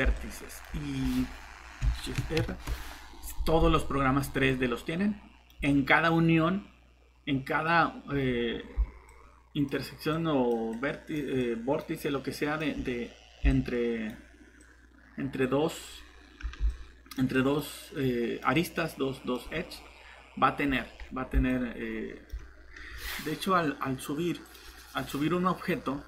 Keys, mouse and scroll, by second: 2.3 ctrl+shift+r, 4.3 typing, 5.3-6.0 typing, 8.2 scroll down 1, 9.1 click, 20.7 scroll down 1, 21.5 click.